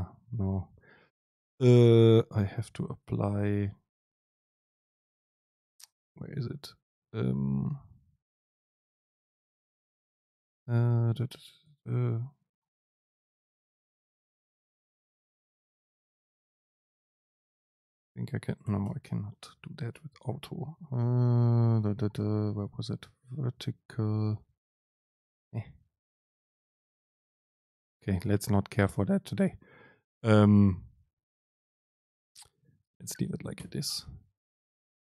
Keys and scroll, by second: 17.9 super+space, 18.9 BackSpace, 19.5 BackSpace, 19.6 super+space, 33.7 ctrl+shift+super+F9.